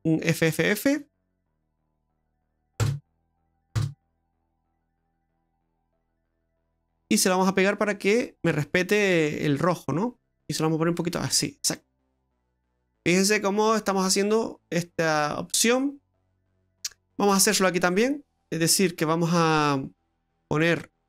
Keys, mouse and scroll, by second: 1.6 f, 1.8 f, 5.8 click, 7.4 click, 10.4 click, 12.1-12.6 scroll down 5, 12.6 middle click, 18.3-19.4 scroll up 8, 20.8 click.